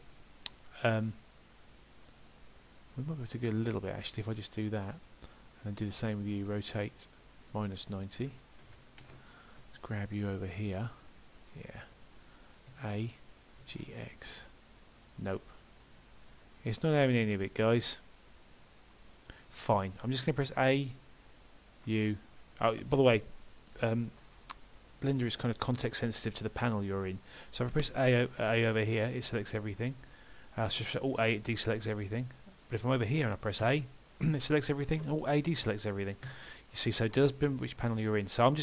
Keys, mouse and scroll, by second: 5.8 click, 6.4 r, 21.9 u, 28.8 click, 30.7 alt+a, 33.6 a, 36.3 a.